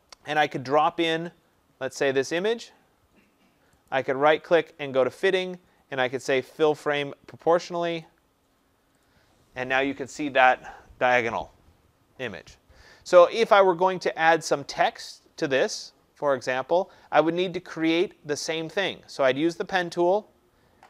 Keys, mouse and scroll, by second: 1.0 click, 3.8 right click, 8.0 click, 9.1 click.